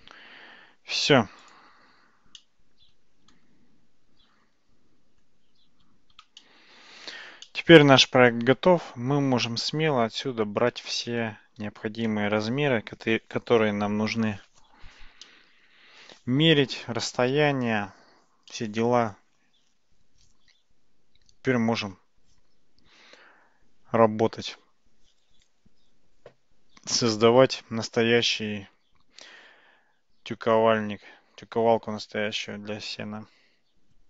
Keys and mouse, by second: 2.4-5.3 middle drag, 6.4-7.2 shift+middle drag, 7.5-11.0 middle drag, 11.5 ctrl+s, 15.3-16.3 middle drag, 18.6-34.0 middle drag.